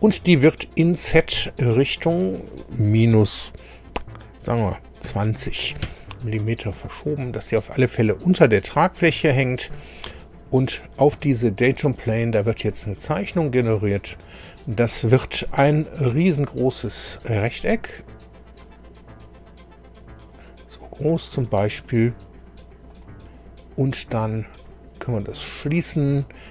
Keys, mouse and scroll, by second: 2.1 click, 3.2 -, 5.1 KP_2, 5.3 KP_0, 5.8 Return, 6.8-9.0 drag, 10.3 scroll down 1, 10.8 click, 11.2 space, 11.6 click, 13.0 click, 14.2-14.5 scroll down 1, 14.6 shift+middle click, 17.0 click, 18.6-21.2 drag, 22.9 click, 24.5 click, 26.0 scroll down 2.